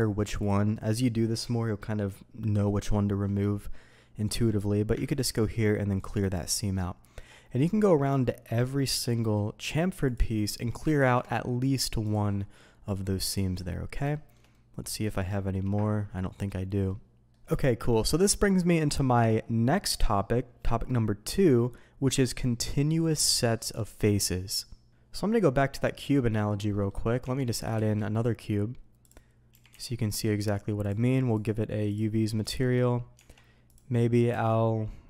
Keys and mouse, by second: 3.2-4.2 middle drag, 4.5 middle click, 5.0 ctrl+e, 7.0 middle click, 7.9 middle click, 8.2 shift+middle click, 8.7 middle click, 9.1 shift+middle click, 10.9 ctrl+e, 13.2 click, 14.1 shift+click, 14.5 click, 15.2 shift+click, 15.7-16.9 drag, 15.7-16.9 right drag, 17.5 shift+drag, 25.5 middle click, 26.2 middle drag, 26.7 drag, 27.2 Tab, 27.7 shift+a, 29.5 g, 29.7 x, 30.1 click, 30.8 click, 31.3 click, 32.2 middle drag, 32.5 shift+middle click, 33.1 Tab, 33.7 click, 34.3 ctrl+b.